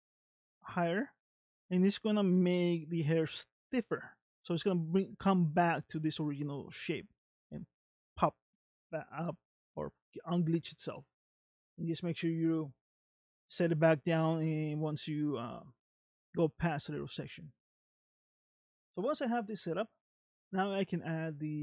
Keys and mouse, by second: 3.6 middle click, 9.3 middle click, 11.0 middle click, 12.5-13.6 drag, 14.2 middle click, 16.8 middle click, 20.3 click.